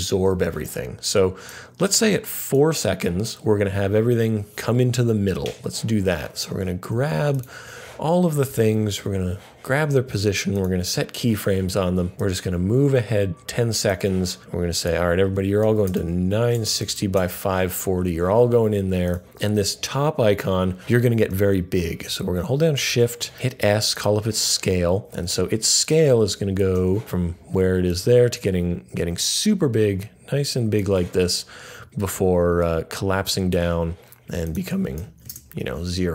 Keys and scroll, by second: 8.9 p, 15.4-17.3 typing, 22.8 s, 35.2 0.